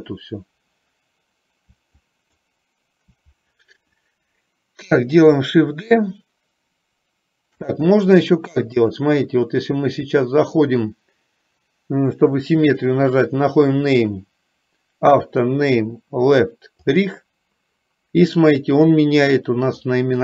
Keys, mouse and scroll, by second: 2.2 shift+click, 8.8-17.3 drag, 18.8 click, 19.9 click.